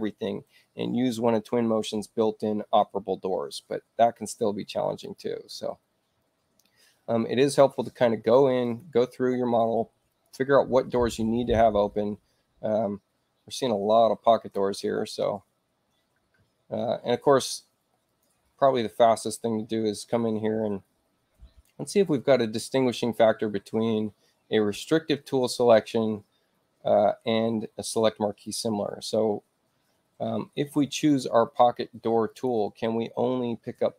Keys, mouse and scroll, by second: 5.0 click, 8.6 click, 10.1 click, 14.3 ctrl+click, 18.1 click, 19.2 click, 28.4 click, 32.2 click.